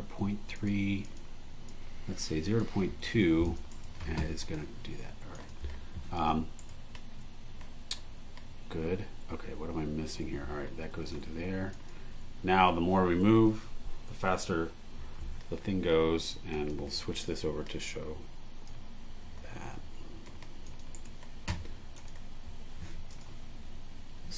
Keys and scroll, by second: 3.0 2, 3.7 super+e, 6.6 super+e, 17.3 BackSpace, 20.9 super+e.